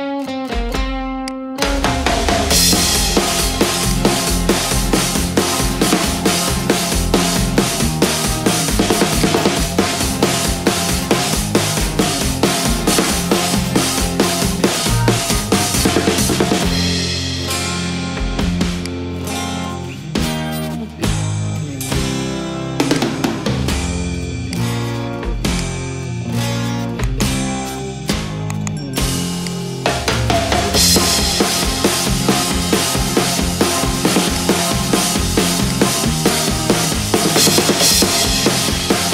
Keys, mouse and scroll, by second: 1.3 click, 2.4 click, 3.3 middle click, 4.0 click, 7.4 click, 8.7 click, 9.3 click, 9.7 click, 13.1 click, 14.9 click, 15.9 click, 17.1-18.4 typing, 18.9 click, 20.0 typing, 20.8 middle click, 23.0 click, 24.6 click, 26.2 click, 26.9-28.1 scroll, 28.2 click, 29.5 click, 30.5 click, 34.4 click, 39.0 click.